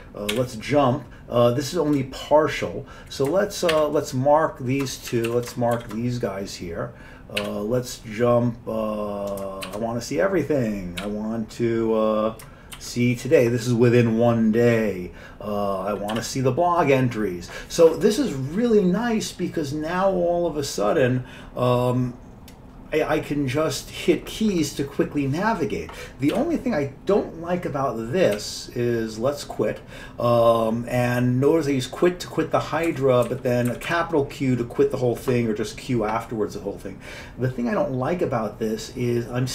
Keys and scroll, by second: 0.5 j, 3.8 shift+m, 5.2 Down, 5.4 Down, 5.9 shift+m, 7.5 j, 9.8 shift+a, 11.1 j, 12.9 shift+t, 16.2 b, 26.4 q, 28.5 q, 33.0 Up, 33.4 Down, 33.8 Up, 34.0 Up.